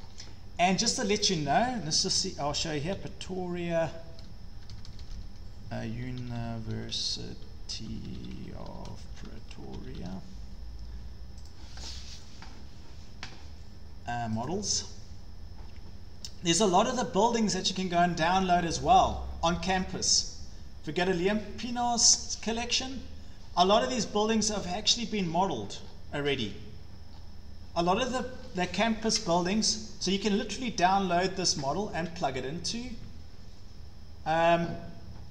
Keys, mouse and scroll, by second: 0.0-0.9 scroll down 6, 1.2 click, 2.3-12.3 typing, 2.7 scroll, 11.5 click, 14.5 click, 14.6-15.4 typing, 16.2 scroll down 2, 17.2-17.6 scroll down 3, 18.3 scroll down 3, 19.1-19.5 scroll down 5, 19.5-19.9 scroll, 21.3 click, 24.6 scroll, 25.3-26.5 scroll, 27.1-27.8 scroll, 28.4 scroll, 29.4 scroll, 30.6 scroll, 31.4-31.8 scroll, 32.1 scroll, 34.6 scroll.